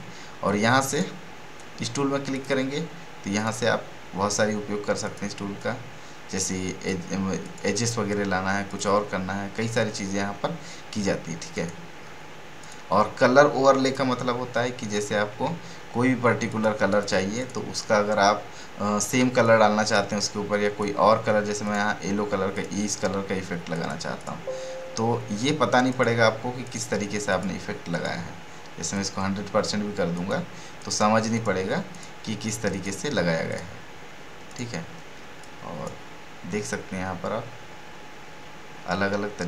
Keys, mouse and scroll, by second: 0.9 click, 4.7-5.0 scroll down 1, 11.5-35.7 drag, 37.1 scroll down 1.